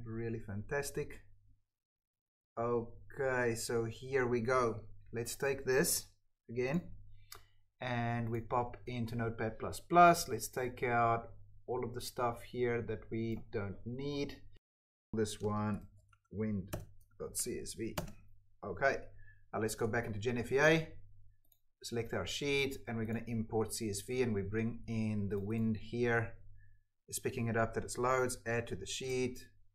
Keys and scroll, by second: 8.7 ctrl+v, 14.6 Delete, 14.8 ctrl+f, 15.0 ctrl+a, 15.1-17.8 typing, 17.8 Return, 18.8 alt+Tab, 19.7 Tab.